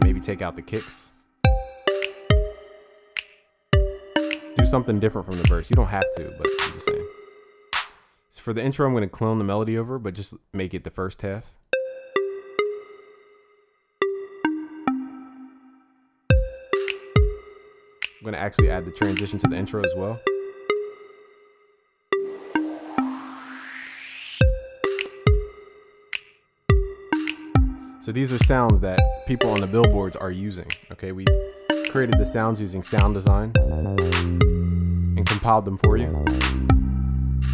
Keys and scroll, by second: 1.5 ctrl+z.